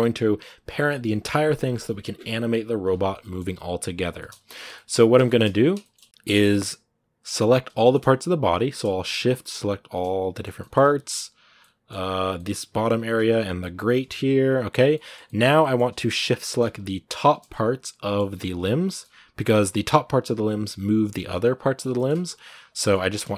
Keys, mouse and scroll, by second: 3.3 r, 4.0 shift+middle click, 4.7 shift+scroll up 1, 4.7 middle click, 5.3 scroll up 1, 5.6-7.2 shift+middle drag, 7.2 right click, 7.6-9.0 shift+middle drag, 9.0 shift+right click, 9.8 middle click, 10.8 g, 11.4 middle click, 11.8 g, 12.1 middle click, 12.7 shift+right click, 13.0 g, 13.6 shift+right click, 13.8 g, 14.7 middle click, 14.9 scroll down 1, 15.0 shift+middle click, 15.2 scroll up 2, 15.4-17.0 middle drag, 17.0 shift+right click, 17.3-18.6 middle drag, 18.6 shift+right click, 18.9 g, 19.4 scroll down 2, 19.5 g, 21.7 middle click, 22.0 g, 22.6 middle click.